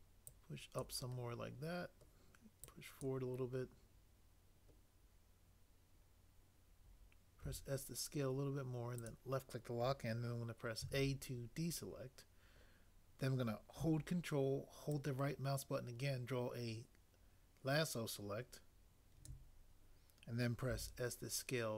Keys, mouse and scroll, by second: 7.4 s, 10.8 a, 20.7 s.